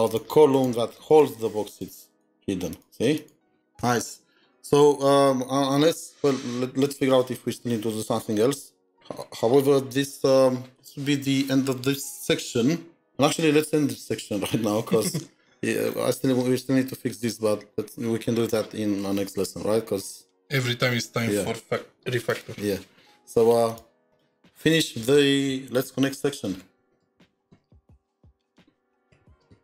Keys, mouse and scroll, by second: 0.0 double click, 0.5 double click, 1.1 double click, 1.7 double click, 2.1 double click, 2.7 double click, 3.2 double click, 5.8 double click, 5.9-7.9 scroll down 4, 15.0-15.9 scroll up 11, 17.3-18.0 scroll down 6, 18.0-20.3 scroll down 15, 24.1 double click, 25.7-29.6 typing.